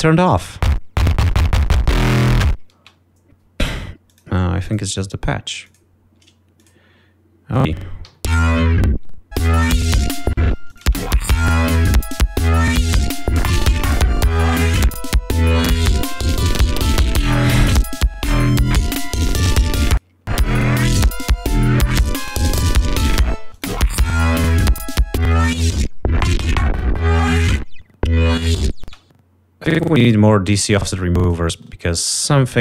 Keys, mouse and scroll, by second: 0.7 space, 3.0 space, 4.3 click, 4.9 click, 5.9 click, 6.8 click, 7.7 click, 8.9 l, 10.1 click, 10.5 ctrl+scroll down 2, 11.1 ctrl+space, 11.3 ctrl+click, 14.7 click, 15.8 scroll down 2, 17.1-17.5 scroll up 2, 18.8 click, 20.0 click, 21.6-21.9 scroll up 2, 23.0 ctrl+scroll down 2, 23.9 space, 24.0 click, 24.4 ctrl+scroll up 2, 25.6 click, 26.5 click, 29.1 space, 31.5 click, 32.5 right click.